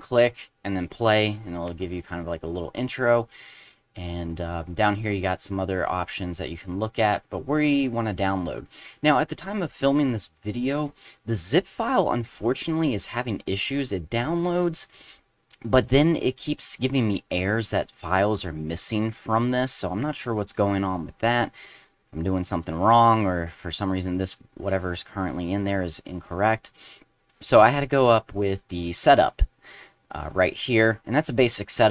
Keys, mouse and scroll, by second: 2.9 middle click, 7.8-8.6 drag, 25.8 click.